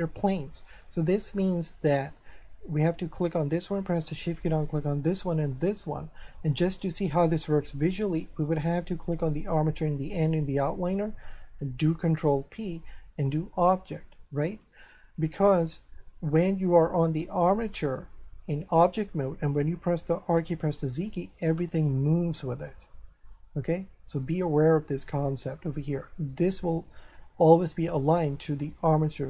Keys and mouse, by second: 1.2 middle click, 4.6 shift+right click, 10.0 shift+click, 12.1 ctrl+p, 13.5 click, 17.3 click, 19.9 r, 20.5 z, 25.4 right click.